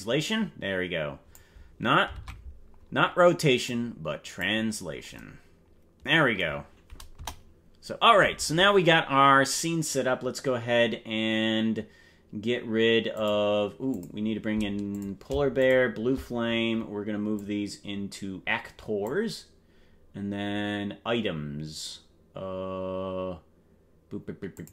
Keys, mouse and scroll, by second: 2.3 ctrl+Tab, 3.6 click, 4.9 scroll down 2, 7.3 KP_0, 8.5 scroll up 1, 13.1 click, 13.9 click, 14.9 click, 15.5 shift+click, 17.3-19.2 drag, 24.5 click.